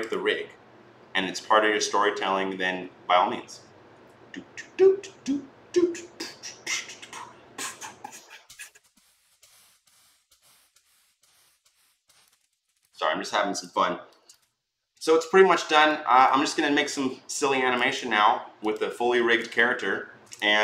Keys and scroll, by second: 12.3 ctrl+z.